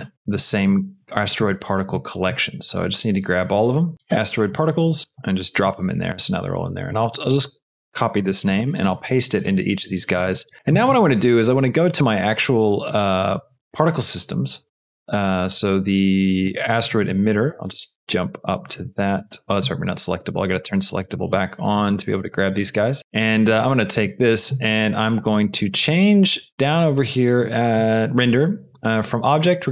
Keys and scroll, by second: 3.9 f, 8.2 ctrl+c, 9.2 ctrl+v.